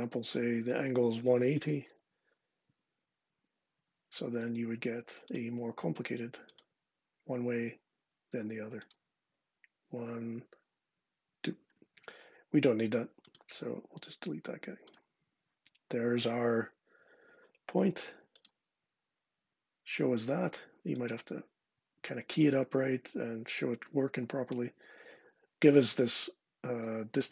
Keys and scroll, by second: 1.1-2.1 typing, 2.5 Tab.